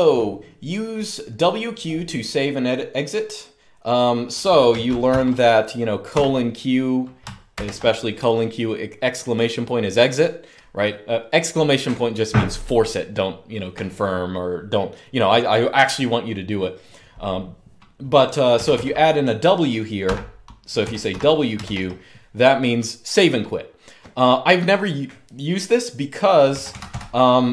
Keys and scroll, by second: 4.8-7.3 typing, 18.3 typing, 19.8-21.3 typing, 26.2-26.6 typing.